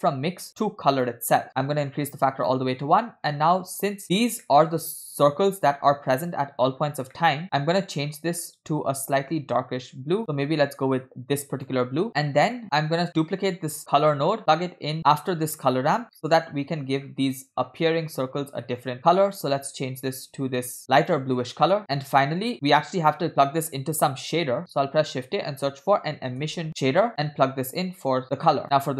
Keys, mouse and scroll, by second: 1.9 click, 4.1 click, 4.1-4.4 scroll down 4, 4.5 middle click, 5.6 scroll up 2, 7.2 middle click, 7.5-9.1 scroll up 5, 7.8 middle drag, 9.1 drag, 12.2 scroll down 1, 12.3 middle click, 13.2 click, 13.8 shift+d, 16.3 middle click, 17.2 scroll up 2, 18.9 middle click, 19.0 scroll up 1, 19.3 click, 21.9 middle click, 21.9 scroll down 2, 22.5 click, 24.6 shift+a, 28.2 click.